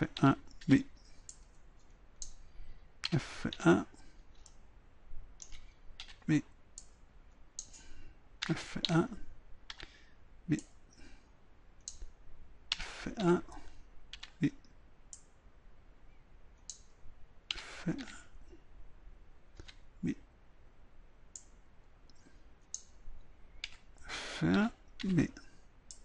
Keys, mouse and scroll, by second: 0.2 a, 0.7 b, 3.4 f, 3.6 a, 4.5-6.0 middle drag, 6.0 b, 8.5 f, 8.9 a, 9.8 b, 12.7 f, 13.2 a, 14.2 b, 17.6 f, 18.0 a, 19.6 b, 23.7 f, 24.6 a, 25.0 b, 25.6-26.0 drag.